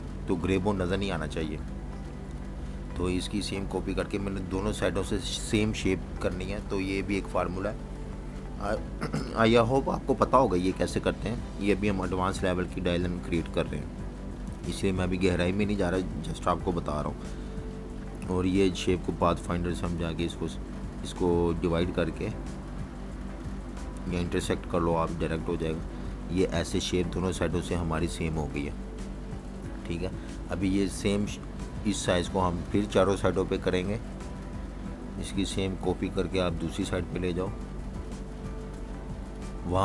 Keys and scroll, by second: 13.1 z, 13.3 z, 14.4 v, 16.0 Page_Down, 26.4 super+y, 29.6 v, 29.7 space, 30.8 super+y, 31.7 super+-, 32.5 space.